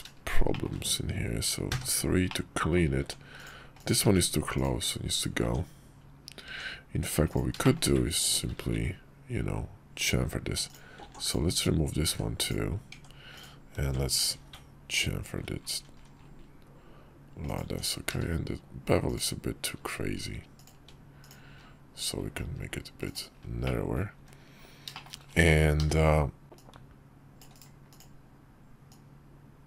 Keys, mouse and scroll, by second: 0.2 shift+click, 1.4 3, 2.0 click, 2.7 Tab, 3.1 click, 3.5 click, 3.8 x, 5.2 Tab, 7.0 Tab, 7.0 click, 7.4 shift+middle click, 8.2 ctrl+b, 10.4 click, 10.9 click, 11.8 x, 12.7 Tab, 13.1 click, 14.0 ctrl+b, 17.4 Tab, 17.8 q, 21.2 q, 22.8 click, 23.3 middle click, 23.9 `, 24.6 shift+middle click, 25.5 d, 26.4-27.3 drag, 27.6 click, 28.6-29.6 drag.